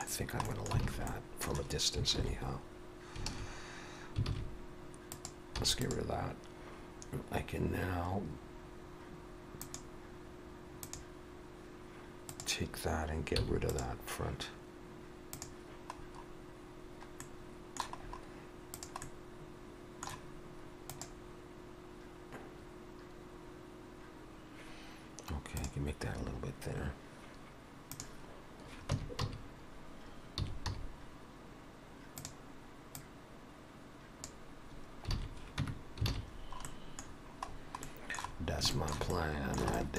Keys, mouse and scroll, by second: 0.5 middle click, 0.9 alt+a, 1.1 middle click, 2.3 alt+h, 4.3 alt+a, 5.2 click, 5.6 x, 9.7 click, 10.9 click, 12.3 click, 13.4 x, 16.0 click, 16.0-16.8 scroll down 3, 17.3 middle click, 18.1-18.8 scroll up 2, 18.8 click, 19.1 middle click, 25.6 click, 26.2-27.1 scroll up 3, 28.0 click, 28.0-28.6 scroll up 1, 29.0 Tab, 29.3 a, 30.4 s, 33.0 click, 35.2 alt+a, 35.6 Tab, 36.1 alt+a, 36.4-38.6 scroll down 7, 36.7 middle click, 37.9 middle click, 38.8 shift+middle click, 39.2 middle click, 39.8 shift+middle click.